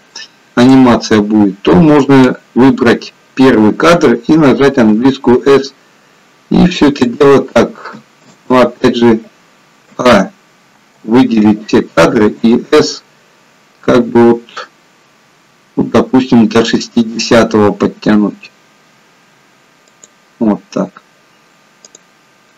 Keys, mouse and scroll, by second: 5.1 s, 8.6 ctrl+z, 10.0 a, 10.9 a, 12.5 s, 21.9 click.